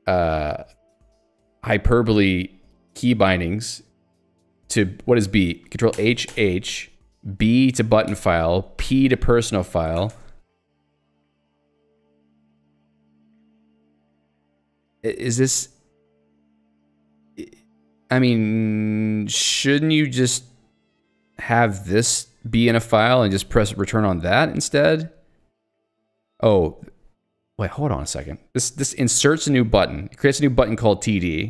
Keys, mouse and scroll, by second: 8.1 b, 10.2 Return, 23.2 click, 26.6 click, 30.2 click, 30.8 click.